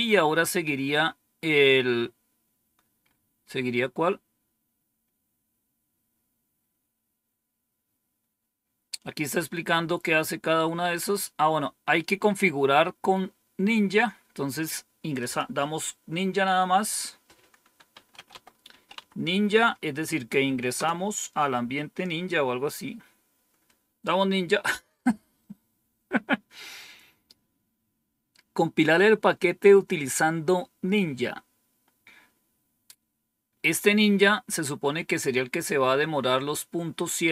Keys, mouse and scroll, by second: 1.2-2.8 scroll down 4, 2.9 scroll up 2, 6.1 scroll down 2, 6.8-7.8 scroll down 3, 7.8-8.9 scroll down 1, 8.9-9.6 scroll down 1, 9.6-10.4 scroll down 1, 15.1 click, 16.8 click, 17.6-19.4 typing, 20.7 Return.